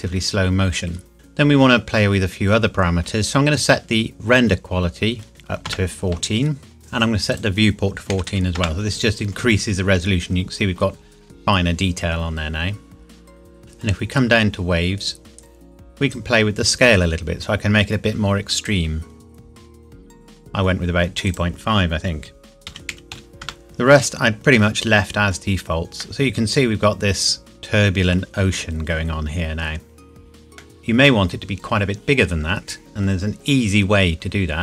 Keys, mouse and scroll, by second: 5.3 KP_4, 7.3 click, 8.7 KP_Enter, 10.3 scroll up 1, 13.6 click, 15.0-15.3 scroll down 1, 16.1 click, 21.3 click, 22.9 KP_Decimal, 23.4 KP_Enter, 24.8 scroll up 1, 26.0 middle click, 29.2-30.4 scroll down 1, 30.6 middle click, 30.8 scroll down 1.